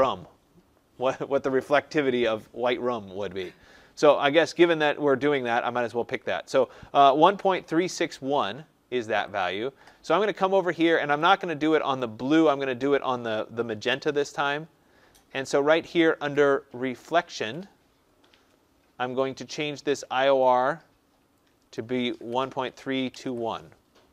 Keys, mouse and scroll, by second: 9.4-11.2 drag, 11.3 click, 14.1 click, 17.3 click, 20.3 click, 21.7 click, 22.0-23.6 typing.